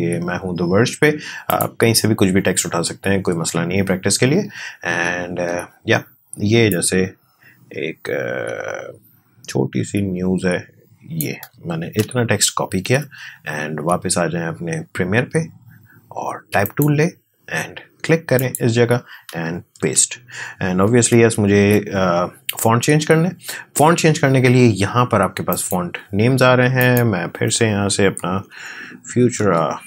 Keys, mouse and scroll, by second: 1.5 click, 4.2 scroll down 1, 6.7-12.0 drag, 11.8 ctrl+c, 12.8 alt+Tab, 16.6 click, 19.7 ctrl+v, 20.8 ctrl+a, 25.5 click, 28.0-29.0 typing, 29.4 Return.